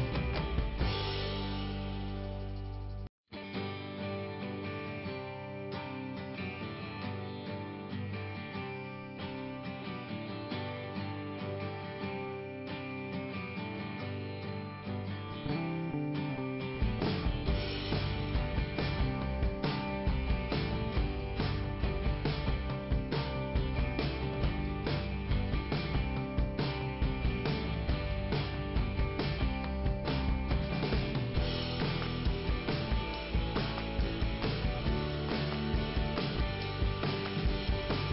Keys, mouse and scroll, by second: 0.0 click, 1.0 click, 3.2 click, 5.3 click, 7.6 click, 11.4 click, 15.9 click, 16.1 click, 16.2 double click, 17.0 double click, 18.2 click, 18.5 scroll up 2, 26.6 click, 28.5 click, 31.3 click.